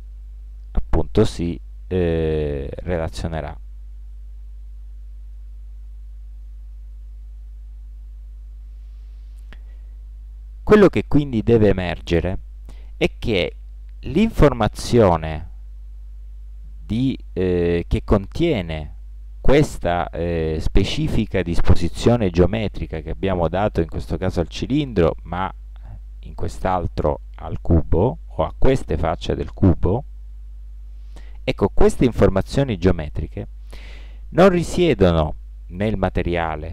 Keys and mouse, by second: 0.7-3.7 middle drag, 4.3-5.4 middle drag, 6.0-8.9 middle drag, 24.9 Tab, 25.5-27.2 right drag, 26.2 Tab, 29.7 a, 30.2 a, 32.4 a.